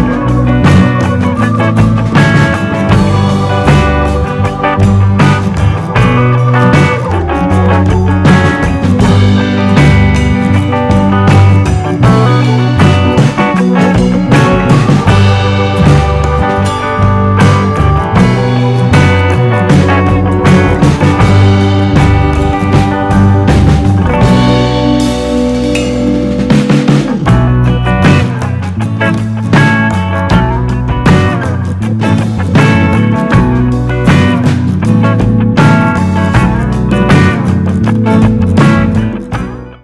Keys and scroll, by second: 14.7 super+c, 14.9 super+v.